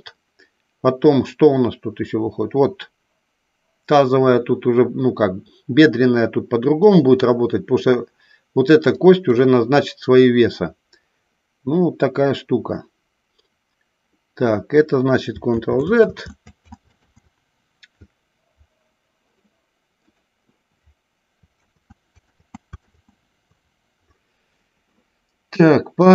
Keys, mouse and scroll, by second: 9.0 click, 15.5 ctrl+z, 16.0 ctrl+z, 16.9 z, 20.0 click, 21.5 ctrl+z, 22.2 ctrl+z, 22.9 ctrl+z, 25.9 click.